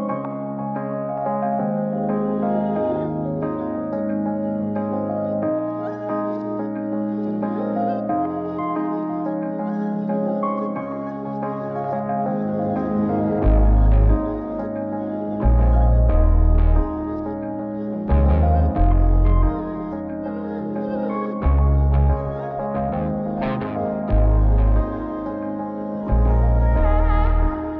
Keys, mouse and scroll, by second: 3.4 click, 4.3 click, 6.4 click, 8.5 click, 9.8 click, 11.0-12.3 drag, 13.0 Tab, 14.9 z, 16.5 click, 17.3 middle click, 18.7 ctrl+a, 19.7 a, 21.0-21.6 drag, 23.6 click, 25.1 click, 25.8-26.8 drag.